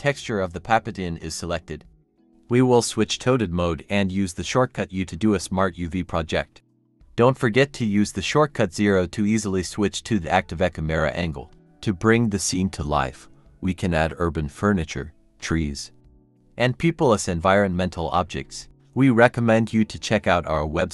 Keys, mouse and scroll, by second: 1.0-3.3 typing, 2.2-2.8 scroll down 1, 4.5-5.2 typing, 6.6 scroll up 1, 7.3 double click, 7.5 scroll up 1, 7.7 Tab, 7.9-9.1 typing, 10.0 Tab, 10.4 typing, 11.0 scroll down 1.